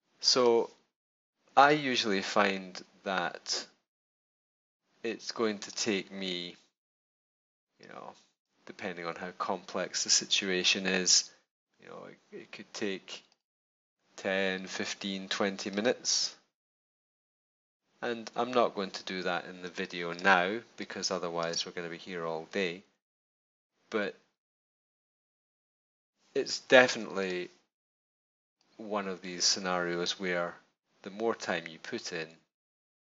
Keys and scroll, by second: 19.6 space.